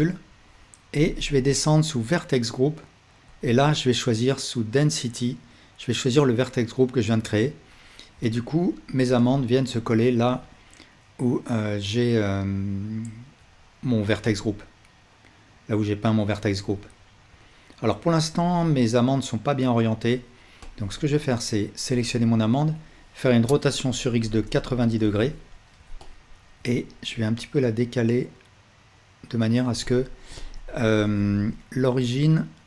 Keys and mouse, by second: 3.3-8.1 middle drag, 8.7-16.2 middle drag, 21.1 Tab, 22.1-26.6 alt+drag, 23.5 r, 31.0 KP_7.